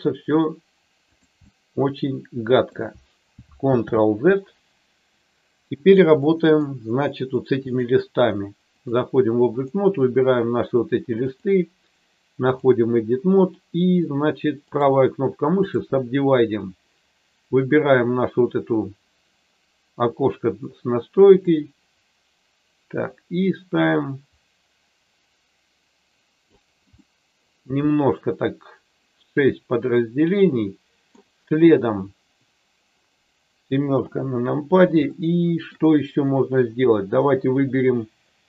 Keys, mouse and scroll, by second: 1.4-2.7 middle drag, 3.6 ctrl+z, 6.2 middle click, 7.9 click, 9.5 click, 11.1-12.6 drag, 14.9 right click, 21.4-26.5 drag, 26.9 middle click, 30.0-31.1 middle drag, 34.0 KP_7, 35.0 shift+scroll up 2, 35.1 shift+middle click, 35.2 shift+middle click.